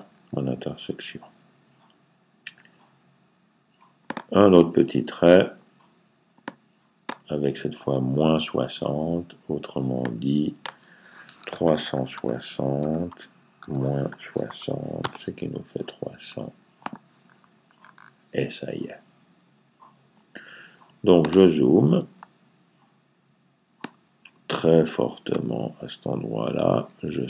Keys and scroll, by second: 11.1-14.3 typing.